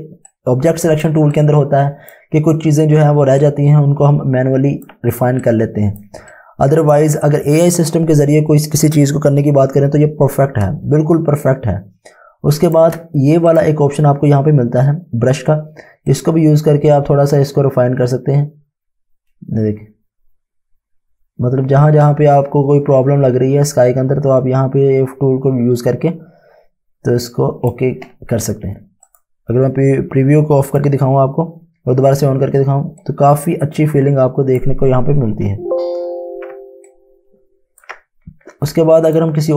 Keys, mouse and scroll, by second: 0.3 click, 1.3 click, 3.4 click, 3.6 Home, 5.4 click, 6.3 click, 10.8 space, 11.4 click, 13.4 click, 16.0 click, 33.0 click, 35.5 ctrl+z, 36.1 ctrl+space, 36.8 ctrl+alt+click, 39.0 click.